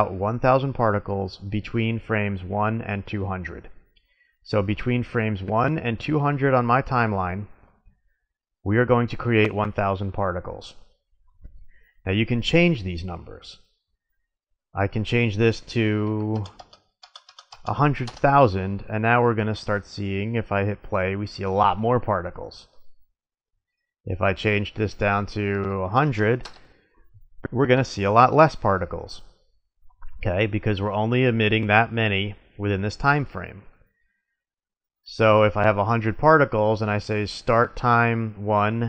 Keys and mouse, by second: 16.4 click, 16.5 KP_0, 17.1 KP_0, 19.9-21.9 drag, 22.6-24.3 middle drag, 26.2 middle click, 34.4-36.2 drag, 38.5-38.8 drag.